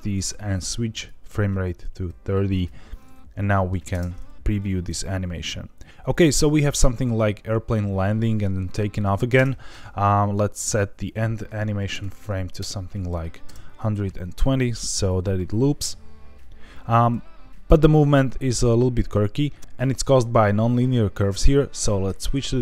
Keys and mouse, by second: 0.9-2.6 drag, 3.4 middle click, 3.9 space, 9.3 space, 10.6-12.9 drag, 13.4 space, 19.5 space, 19.6 KP_3.